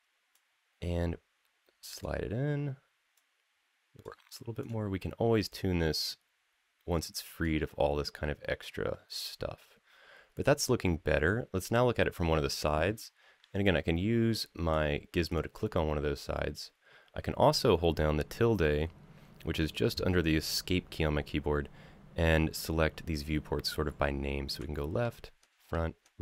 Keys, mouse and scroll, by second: 0.1-1.8 drag, 2.9 click, 4.4 click, 5.3-7.2 drag, 13.4-14.5 drag, 15.0 click, 25.2-26.2 typing.